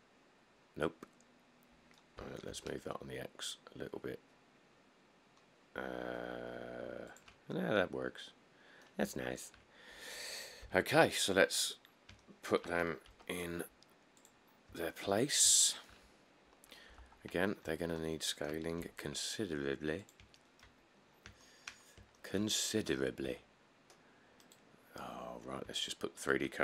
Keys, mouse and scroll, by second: 2.4 g, 2.7 x, 10.8 7, 11.3-12.3 scroll, 13.3 g, 14.7 scroll, 15.4 middle click, 15.7 middle click, 17.2 1, 17.7 middle click, 17.8 middle click, 17.8 middle click, 18.4 scroll, 19.0 g, 20.9 middle click, 21.0 middle click, 21.1 middle click, 21.3 middle click, 21.4 middle click, 22.0 shift+middle click, 22.1 middle click, 23.0 middle click, 23.5 s, 25.1 middle click, 25.2 middle click, 25.3 middle click.